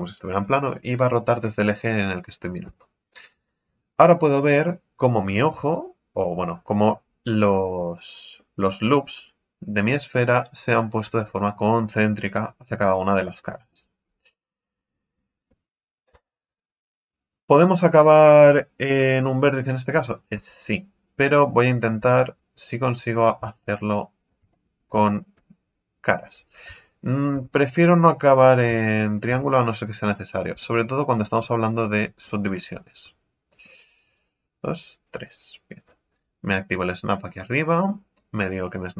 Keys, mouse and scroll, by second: 2.6 KP_1, 6.5-6.9 scroll down 2, 6.9-10.0 middle drag, 13.2 middle click, 14.0-14.4 scroll up 3, 14.4-15.4 right drag, 15.4 KP_1, 20.3 x, 21.7 right click, 21.9 x, 22.7-23.1 scroll up 1, 23.1-24.5 right drag, 24.5 middle click, 25.1 shift+right click, 25.9 f, 26.5 right click, 27.4 f, 27.8 f, 28.5 right click, 29.4 f, 30.5 f, 32.4 ctrl+z, 33.5 ctrl+r, 35.8 right click, 36.9 click, 37.4-38.9 drag.